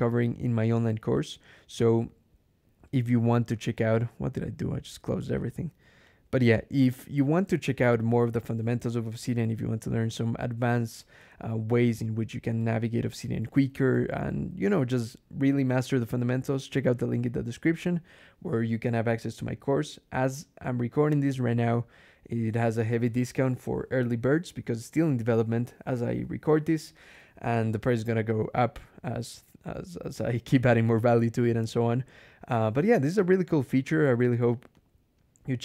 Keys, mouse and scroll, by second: 1.0 click, 3.8 click, 5.2 click, 5.9 click, 8.7 Escape, 9.0-13.8 typing, 10.8 Return, 11.0 Escape, 34.6 click.